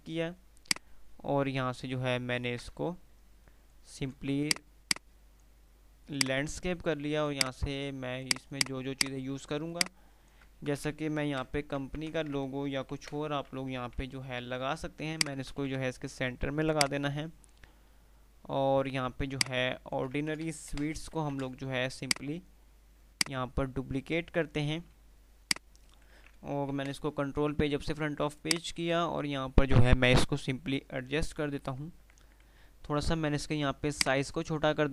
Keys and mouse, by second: 0.7-4.0 shift+drag, 10.0-10.6 alt+click, 10.7 ctrl+g, 11.5 Delete, 11.9 ctrl+z, 13.0 shift+Page_Up, 15.2 shift+click, 15.7 shift+e, 16.9 shift+click, 19.6-20.3 alt+shift+click, 20.5 ctrl+shift+g, 20.9 shift+Delete, 21.5 ctrl+shift+z, 22.2-24.5 shift+click, 23.3-25.2 shift+right drag, 25.3-26.3 shift+F2, 27.0 shift+Page_Up, 28.6 click, 31.9 ctrl+r, 32.2 ctrl+r, 34.2-34.9 drag.